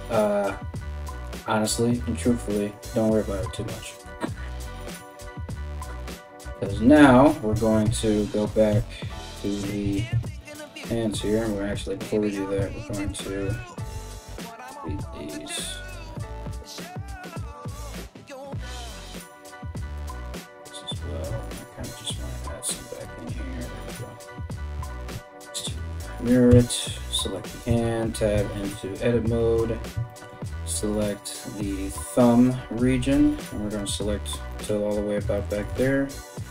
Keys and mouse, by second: 7.4 Tab, 8.3 KP_1, 9.4 Tab, 11.0 alt+middle click, 11.0 alt+right click, 12.3 ctrl+x, 12.9 alt+middle click, 12.9 alt+right click, 13.2 ctrl+x, 13.7 alt+right click, 14.4 g, 15.7 ctrl+z, 16.5 ctrl+z, 16.7 alt+middle click, 16.7 alt+right click, 17.3 ctrl+x, 18.8 alt+middle click, 18.8 alt+right click, 19.6 ctrl+x, 21.4 ctrl+r, 22.7-36.5 middle drag, 24.7 alt+x, 26.1 Tab, 26.2 right click, 27.3 Tab, 32.7 3, 33.4 alt+right click, 35.3 z, 36.2 b.